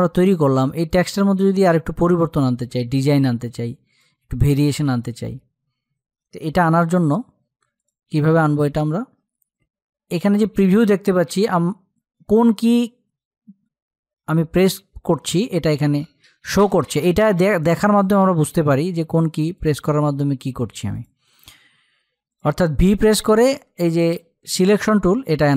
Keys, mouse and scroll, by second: 2.2 z, 2.8 click, 3.8 space, 4.0 click, 4.3 space, 6.3 v, 7.2 click, 15.1 v, 18.5 click, 25.0 click.